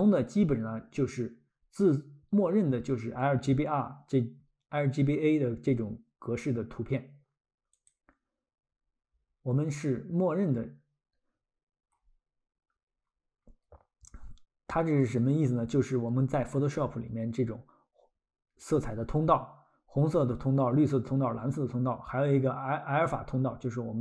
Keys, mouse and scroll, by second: 7.7 click.